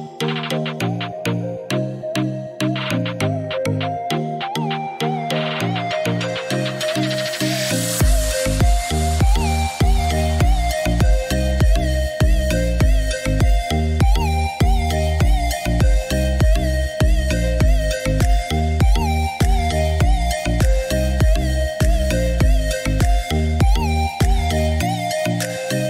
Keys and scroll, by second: 9.7 6, 10.4 Return, 13.0 Escape.